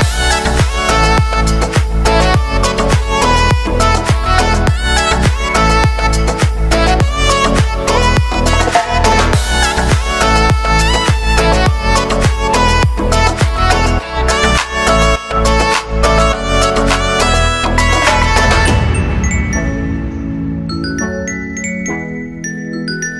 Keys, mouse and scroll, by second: 0.6 click, 2.0 Return, 2.8-7.5 drag, 9.4 space, 12.0 click, 12.5 space, 13.8 click, 14.4 ctrl+d, 15.6-23.1 shift+drag.